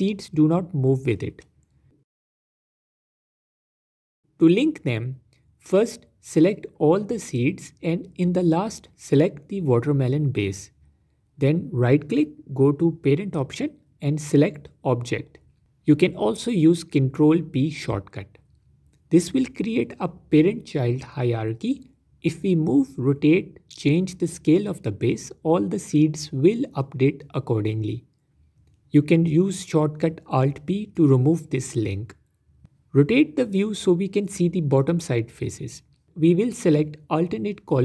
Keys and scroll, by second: 4.2 ctrl+z, 26.0 s, 27.3 Escape, 28.1 ctrl+z, 33.7 Tab.